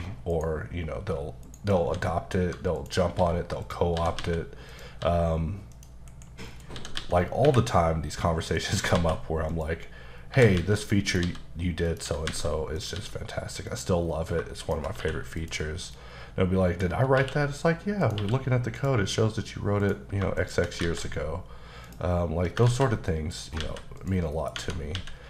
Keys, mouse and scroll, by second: 0.3 shift+right click, 1.4 shift+double right click, 1.8 shift+a, 2.9 click, 3.2-5.0 typing, 3.6 click, 4.7 click, 5.7 click, 6.1-7.4 typing, 6.5-6.8 scroll down 2, 8.6 click, 9.0 typing, 10.2 click, 10.3 scroll down 2, 10.3-13.0 typing, 11.1 click, 11.9 click, 12.8 click, 13.7 click, 14.2 scroll down 2, 14.6 shift+click, 14.9 click, 15.0 q, 15.4 click, 15.9 middle click, 16.9 scroll down 2, 17.2 q, 18.0 click, 18.2 q, 18.8 click, 19.3-19.8 scroll down 1, 19.8 click, 20.4 shift+click, 21.9 click, 22.7 ctrl+z, 23.1 middle click, 23.4 scroll up 2, 23.6 alt+a, 24.0 click, 24.3 middle click, 24.6 Tab, 24.9 a.